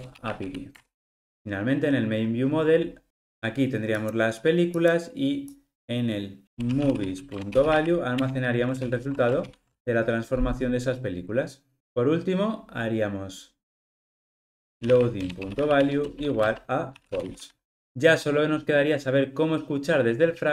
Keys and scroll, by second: 7.4 Return, 8.7 alt+super+l, 9.5 ctrl+alt+o, 15.3 Return, 17.7 ctrl+alt+o.